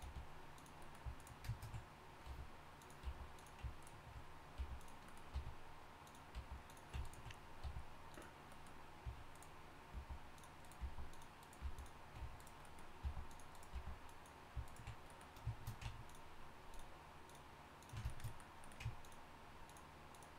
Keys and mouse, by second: 0.0 g, 2.3 r, 3.1 g, 4.6 g, 5.3 r, 6.3 g, 7.6 r, 9.9 g, 10.8 g, 11.6 g, 13.0 g, 13.7 g.